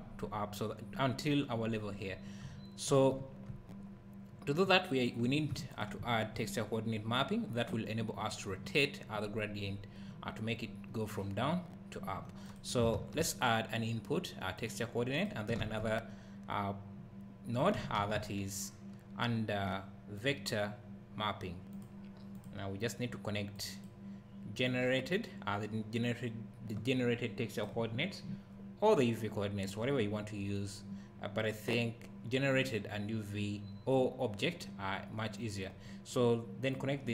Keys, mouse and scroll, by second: 2.4 `, 5.0 click, 5.7 click, 12.5 click, 12.9 shift+a, 15.2 click, 15.6 shift+a, 22.4 click, 23.6 click, 24.6 click, 36.7 click.